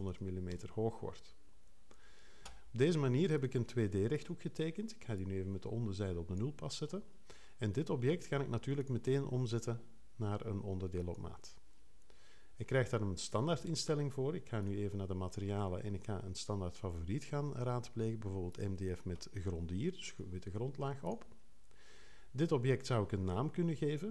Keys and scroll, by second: 0.5 Return.